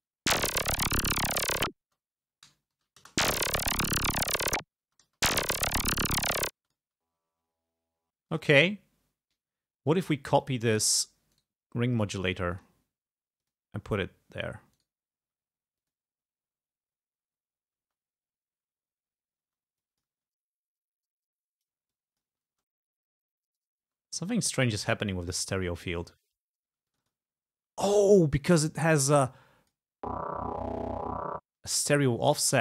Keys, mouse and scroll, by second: 0.1 space, 1.9 space, 2.7 alt+Down, 3.0 alt+space, 4.9 space, 6.6 space, 6.7 click, 8.2 space, 8.3 click, 9.6 scroll up 2, 10.4 click, 11.4 right click, 12.5 click, 13.4 click, 14.8 right click, 15.8 click, 17.8 space, 19.5 space, 19.8 click, 20.1 space, 21.5 click, 21.9 click, 22.3 space, 23.2 click, 23.9 space, 26.0 space, 26.7 space, 26.9 click, 29.2 click, 30.0 space, 31.5 space, 31.9-32.6 drag.